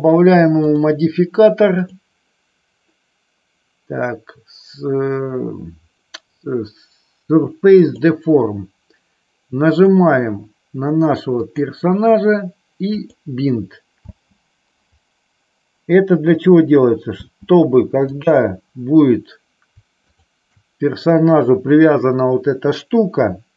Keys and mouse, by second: 0.8 click, 2.0-8.2 drag, 9.6 click, 13.2 click, 14.3 space, 17.3 space, 18.2 click, 20.2 shift+click.